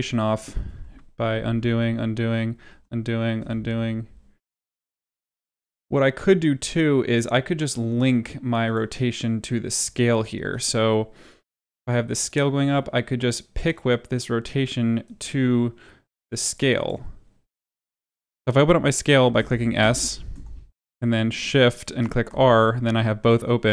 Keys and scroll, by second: 2.6 ctrl+z, 17.8 s, 19.3 s.